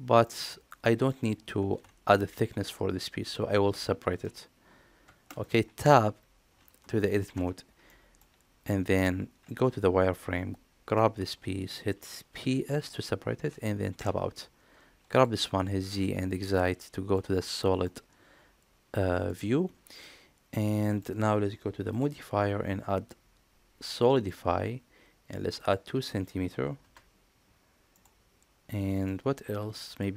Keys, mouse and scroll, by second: 0.1-0.9 middle drag, 6.8 middle click, 7.2 Tab, 7.7 middle click, 9.3 z, 10.3 click, 12.2 p, 13.8 Tab, 15.0 click, 15.7 z, 16.4-17.0 middle drag, 17.7-19.1 middle drag, 19.9-20.8 middle drag, 21.7-24.1 drag, 25.6-27.4 drag, 28.9-29.9 middle drag.